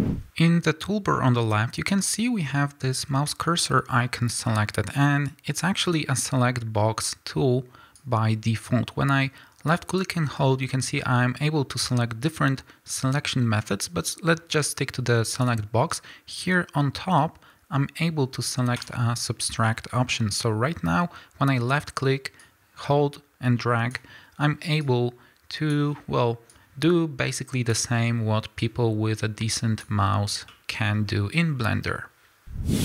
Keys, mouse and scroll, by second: 0.0 click, 8.0-18.8 drag, 19.7-22.4 middle drag, 20.2 scroll down 1, 20.7-22.4 scroll up 2, 22.4-24.9 drag, 26.5-28.7 drag, 30.3 scroll down 2, 30.5-32.8 middle drag, 31.0-32.7 scroll up 2, 32.7 scroll up 1.